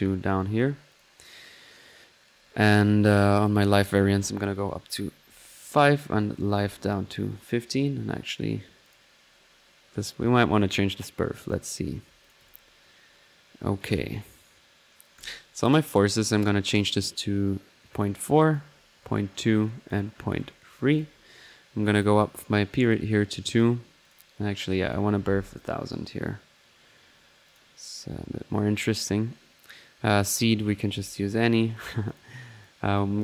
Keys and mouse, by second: 8.8-9.4 drag, 11.5 click, 12.2-13.5 drag, 13.3-14.0 typing, 13.8-14.9 drag, 15.2-16.9 drag, 17.9-20.0 drag, 22.0-23.2 drag, 24.0 click, 24.8 click, 27.5-28.0 drag, 30.7 drag, 32.1 click, 32.6-33.2 drag.